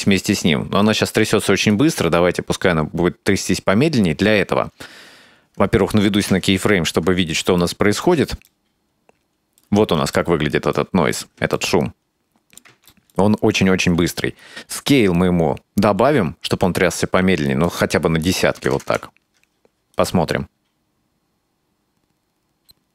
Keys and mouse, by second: 6.3 KP_Decimal, 7.7 middle click, 8.5-9.6 middle drag, 10.2 shift+middle click, 11.6-12.7 ctrl+middle drag, 13.0 shift+middle click, 14.8-17.7 drag, 17.9-19.3 drag, 20.0 click, 20.2 space.